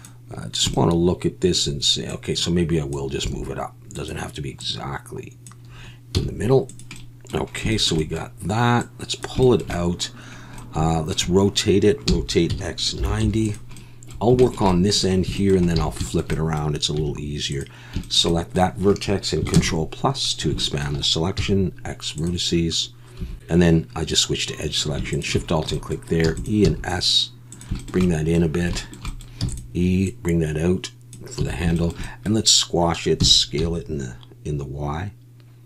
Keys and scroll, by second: 3.2 s, 6.1 z, 12.1 r, 12.5 x, 13.0 9, 13.2 0, 15.8 alt+a, 17.0 1, 19.5 ctrl+KP_Add, 21.4 x, 23.2 2, 26.2 e, 26.6 s, 29.4 e, 31.4 a, 33.2 s, 33.6 y.